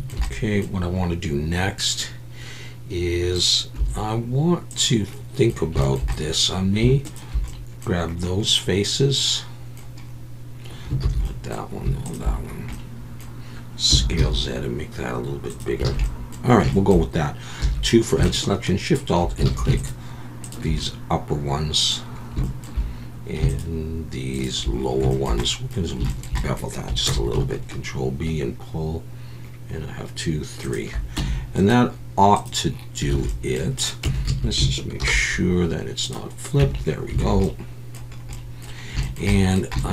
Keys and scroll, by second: 3.8 3, 11.0 ctrl+z, 13.9 s, 14.2 z, 15.9 alt+a, 17.6 2, 19.5 alt+a, 27.1 ctrl+b, 31.2 Tab, 33.1 alt+a, 34.0 Tab, 34.3 a, 35.0 alt+n, 36.6 Tab, 37.2 alt+a, 37.3 alt+n.